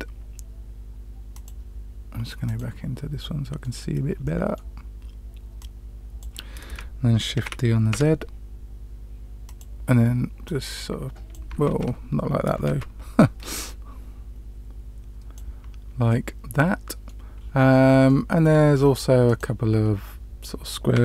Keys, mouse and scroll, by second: 2.4 click, 3.1-3.6 middle drag, 4.2-4.6 middle drag, 5.5-6.2 drag, 7.3 shift+d, 10.4 click, 11.6 ctrl+x, 12.6 ctrl+z, 13.6-15.3 drag, 16.0-17.1 middle drag, 18.0-18.4 shift+middle drag, 18.7-19.0 scroll down 2, 19.2 click.